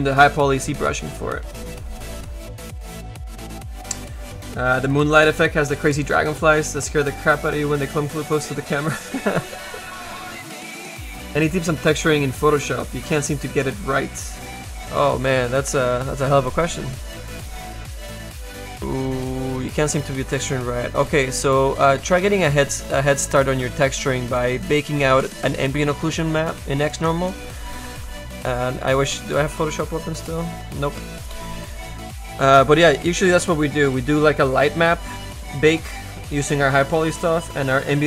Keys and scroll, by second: 16.9 space, 21.4 z.